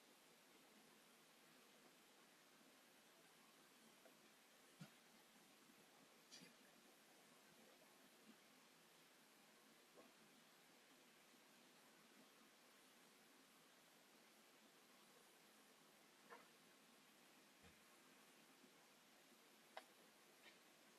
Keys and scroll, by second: 2.8 Delete, 6.8 s, 11.8 space, 15.0 s, 18.6 space.